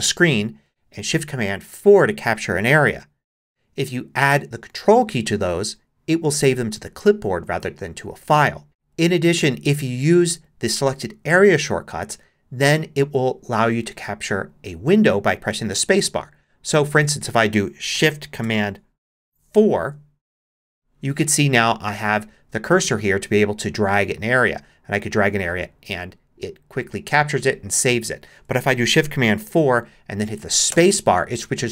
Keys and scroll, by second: 19.5 shift+super+4, 29.4 shift+super+4, 30.7 space.